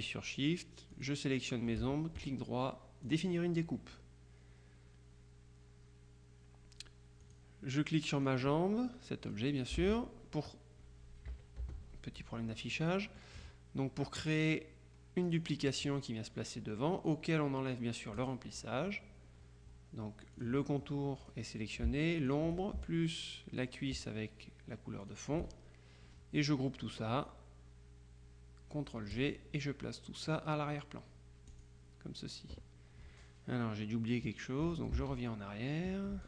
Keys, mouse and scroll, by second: 1.1 shift+click, 2.3 right click, 3.1 click, 7.3 click, 8.3-9.9 drag, 9.9 ctrl+z, 11.4 KP_Subtract, 11.7 KP_Add, 13.0 click, 13.8 middle click, 15.3 click, 18.2 click, 20.4-21.9 drag, 22.3 shift+click, 25.1 click, 29.2 click, 31.6 click, 35.0 ctrl+z.